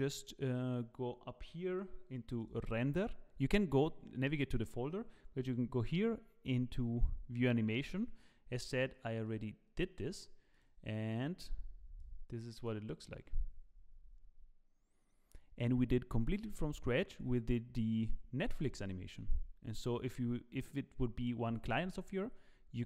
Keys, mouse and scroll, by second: 2.4 click.